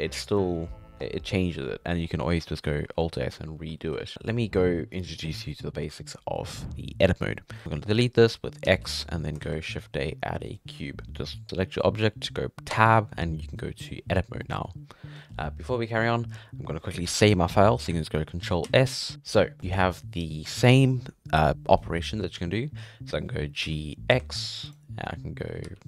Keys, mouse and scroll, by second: 2.1 middle click, 2.8 alt+s, 3.8 alt+a, 4.1 right click, 7.6 x, 8.6 x, 9.4 shift+a, 11.0-11.4 scroll down 2, 13.1 Tab, 14.1 scroll down 4, 14.4 middle click, 14.6-15.1 scroll up 3, 15.1-18.3 middle drag, 18.7 ctrl+s, 19.6-21.8 middle drag, 22.1-22.5 scroll down 4, 22.8-23.6 scroll up 1, 23.6 g, 25.6 g.